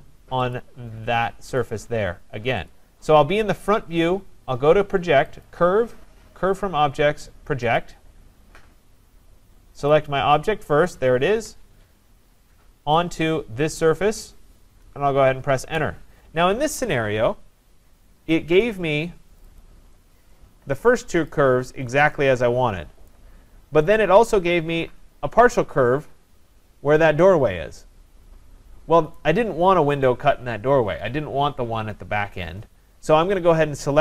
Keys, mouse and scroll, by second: 0.6 click, 1.6 click, 2.7 click, 5.5 click, 9.9 click, 11.3 Return, 13.2 click, 15.6 Return, 18.6 click, 19.4 click, 19.6 click, 20.0-20.6 scroll, 20.8-21.3 scroll, 21.3 click, 23.1 right click, 23.5-24.3 scroll, 24.3 right click, 25.5 click, 29.2 right click.